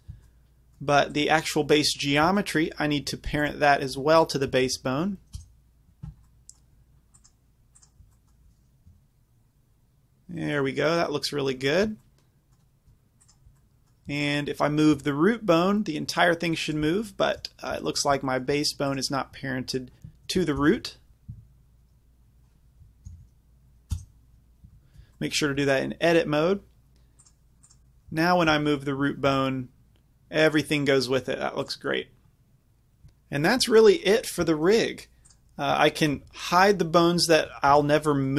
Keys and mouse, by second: 1.2-4.6 middle drag, 4.7 ctrl+p, 9.0-9.9 drag, 9.0 g, 11.7-12.2 right drag, 13.3-15.0 middle drag, 15.0 drag, 15.0 g, 16.8-18.4 right drag, 18.9-20.6 middle drag, 20.6 click, 20.6 ctrl+p, 21.1 ctrl+z, 21.4 Tab, 23.1 ctrl+p, 24.7 Tab, 25.9-28.2 middle drag, 28.2-30.8 right drag, 29.4 g, 31.7 right click, 34.5 z, 36.2 h, 36.6-37.7 drag, 37.8 z.